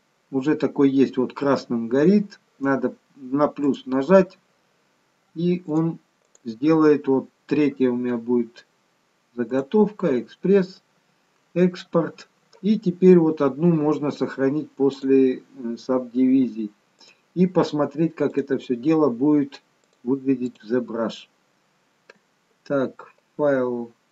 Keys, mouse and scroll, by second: 14.9 click, 17.0 click, 19.9 click, 20.5 click.